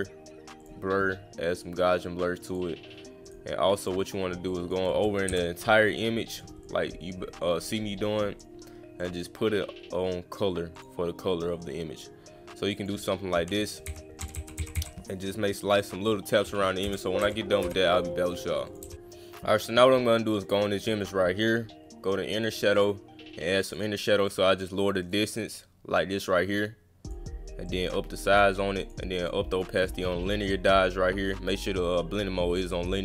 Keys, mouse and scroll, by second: 0.6 click, 2.4 click, 3.2 click, 3.8 click, 4.6 click, 5.8 click, 6.6-8.4 drag, 9.0 click, 10.8 click, 12.8 click, 15.6 click, 16.5 click, 18.7 click, 20.3 click, 20.4 click, 22.5 click, 22.7 click, 23.6 drag, 24.3 click, 27.7 click, 28.8 click, 29.2 click, 29.5 click, 29.8 click, 30.7 click, 32.6 click.